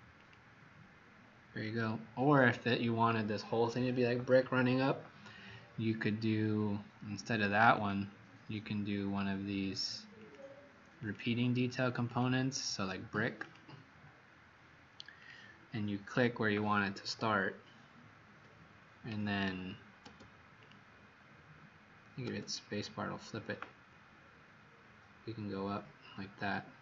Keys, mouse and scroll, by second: 16.9 Escape, 20.5 click, 24.1-26.8 scroll down 3.